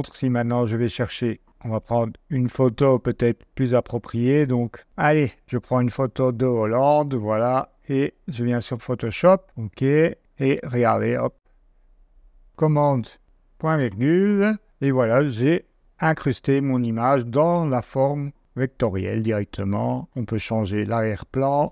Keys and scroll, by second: 13.2 super+;, 21.1 d, 21.6 super+BackSpace.